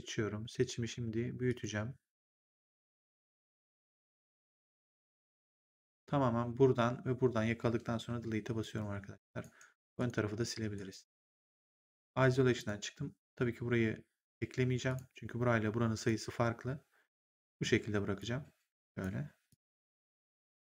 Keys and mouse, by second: 1.4 click, 4.1 click, 8.0 Delete, 8.5 right click, 9.7 click, 10.2 Delete, 10.6 right click, 11.4 ctrl+1, 12.5 click, 14.8 click, 15.8 click, 16.2 1, 18.1 click, 19.4 click.